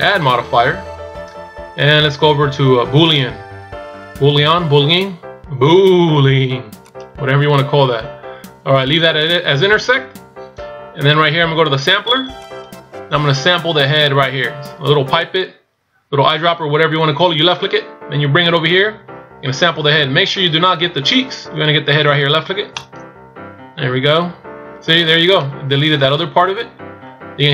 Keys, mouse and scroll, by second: 0.0 click, 12.4 click, 25.3 middle click.